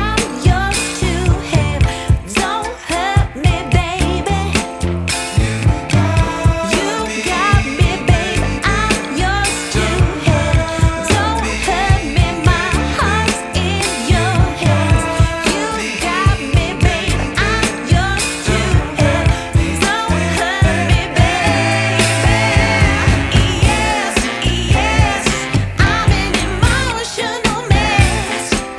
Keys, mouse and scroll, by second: 0.1 click, 0.4 shift+d, 0.8 click, 1.7 click, 2.4-2.8 drag, 3.7 click, 3.9 click, 4.3 click, 4.5 click, 4.9 click, 5.2 click, 5.4 click, 6.4 drag, 7.1 click, 7.3 drag, 7.5 click, 10.0 click, 10.7 click, 11.5 click, 12.1 click, 15.0 click, 15.5 drag, 16.1 click, 16.1 middle click, 17.2 click, 17.4 space, 21.3 click, 22.4 click, 22.7 click, 24.0 click, 24.3-25.9 drag, 26.2-27.8 drag, 28.2 shift+click.